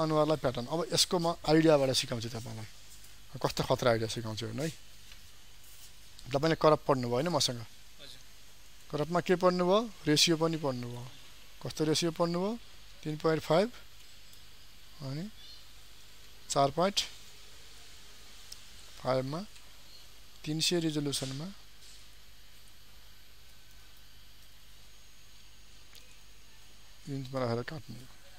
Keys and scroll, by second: 1.7 ctrl+d.